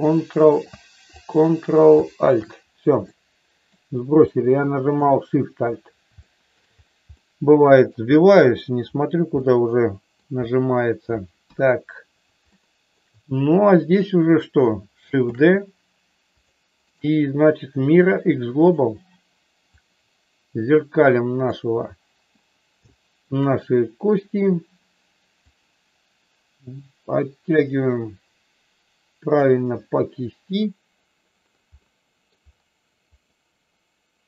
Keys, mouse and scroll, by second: 1.1 ctrl+click, 3.0 middle click, 4.3 shift+middle click, 6.3 shift+middle click, 7.3 middle click, 9.3 middle click, 11.4 KP_1, 12.5 shift+middle click, 15.1 shift+d, 16.4 click, 17.0-18.8 right drag, 19.8-21.4 drag, 22.8 shift+middle click, 25.4-29.4 drag, 31.8 middle click, 33.1-34.2 middle drag.